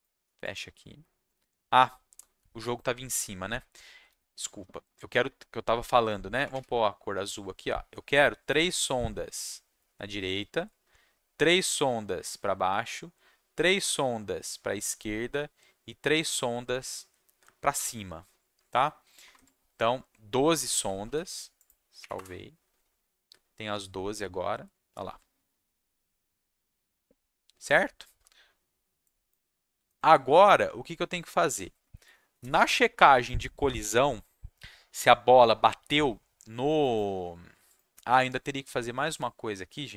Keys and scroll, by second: 6.1-7.0 typing, 19.3 alt+Tab, 21.0 ctrl+s, 22.0 Up, 22.1 Return.